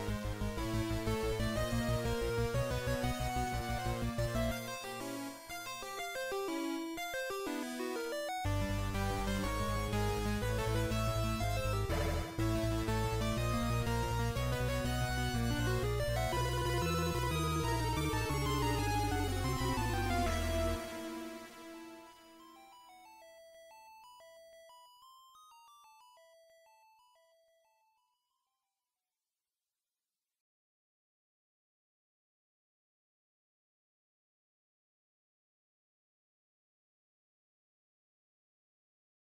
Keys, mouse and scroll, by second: 0.0 z, 1.8 middle click, 4.4 click, 8.0 middle click, 9.6 scroll down 2, 10.2-10.8 scroll down 2, 10.8 shift+a, 15.8 middle click, 16.8 right click, 19.0 KP_5, 20.0 middle click, 21.6-22.4 scroll up 2, 23.0 middle click, 25.2 ctrl+alt+KP_0, 26.8 right click, 28.4 g, 30.0 click, 32.4 right click, 33.4 scroll up 2, 33.9 z, 35.2 KP_1, 36.4 z, 36.8-37.3 scroll up 1, 36.8 KP_5, 38.8 scroll up 2.